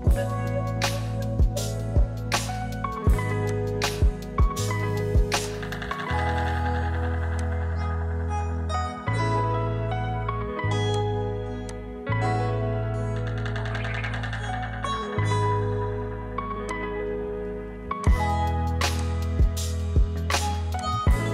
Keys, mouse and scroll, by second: 3.0-17.6 drag.